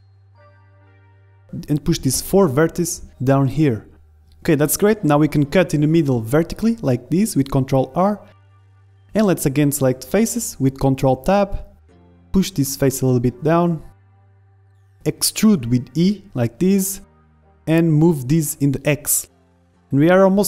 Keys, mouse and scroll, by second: 0.1 ctrl+z, 1.4-3.3 drag, 3.9-5.9 middle drag, 4.7 ctrl+r, 8.3 ctrl+Tab, 11.8-14.3 drag, 12.4-13.7 right drag, 14.5 middle click, 14.9 e, 17.6 r, 17.8-19.7 drag.